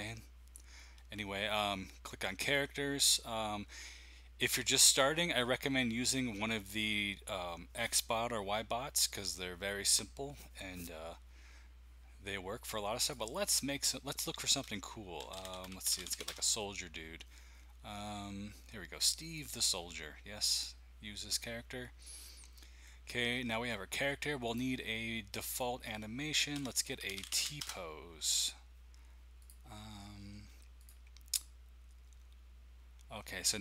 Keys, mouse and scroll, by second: 2.4-5.5 drag, 13.0 click, 14.9-16.5 typing, 19.2 click, 20.5 click, 24.4 click, 26.3-28.2 typing, 29.4 click, 30.8 click, 30.9-31.4 typing.